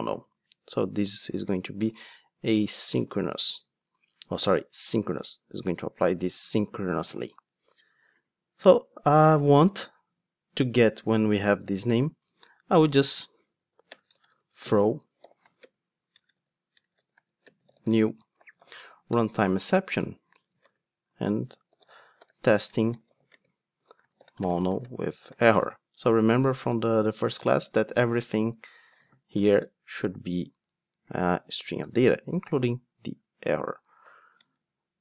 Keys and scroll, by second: 3.6 ctrl+Tab, 19.1 Return.